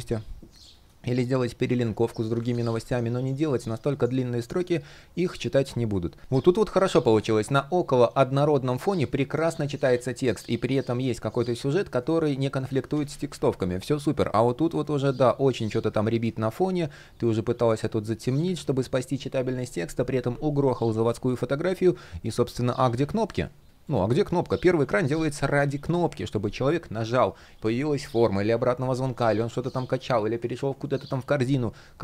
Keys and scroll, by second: 2.0 super+z, 6.7 shift+p, 9.4 super+z, 12.5 super+z, 15.7 super+z, 18.2 super+z.